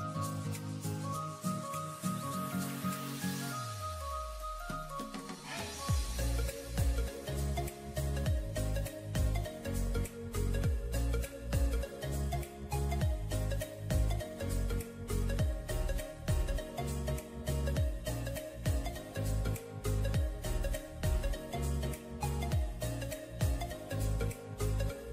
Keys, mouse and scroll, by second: 14.0-14.4 alt+scroll up 1, 18.8-20.0 scroll down 1, 21.8 alt+scroll down 1.